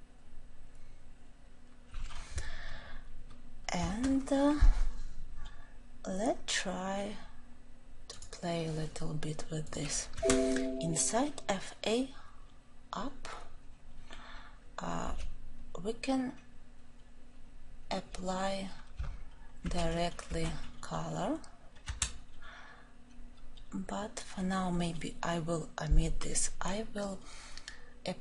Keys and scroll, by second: 19.6 ctrl+;.